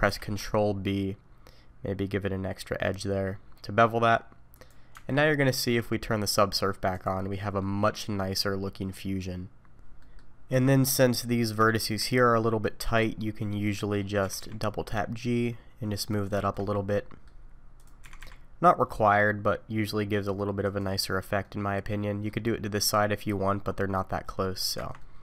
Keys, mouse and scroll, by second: 0.1 ctrl+b, 4.9 Tab, 7.0 click, 7.6 middle click, 9.7 Tab, 10.0 middle click, 10.5 Tab, 10.7 middle click, 11.0-11.6 scroll up 3, 11.6 shift+middle click, 12.8 click, 13.2-13.7 scroll down 2, 13.7 scroll down 1, 13.8 middle click, 14.2 g, 16.5 shift+middle click, 16.9 middle click, 17.8 click, 18.0 g, 21.4 middle click, 23.0 middle click, 23.6-24.4 scroll up 1, 24.4 middle click, 24.8 Tab, 25.0 middle click.